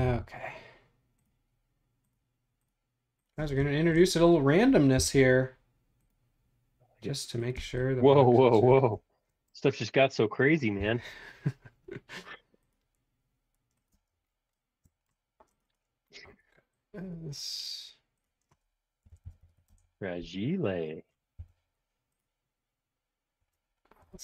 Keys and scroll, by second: 0.0 m, 3.3 space, 3.9 space, 4.9 m, 7.6 space, 10.9 m, 13.9 space, 16.2 Escape, 16.7 super+z, 18.8-20.0 typing, 21.5 m, 24.1 Escape.